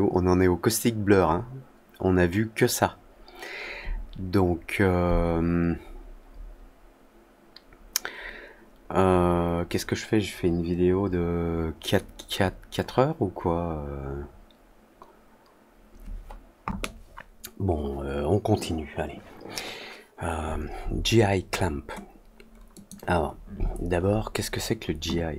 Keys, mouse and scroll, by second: 22.7 click.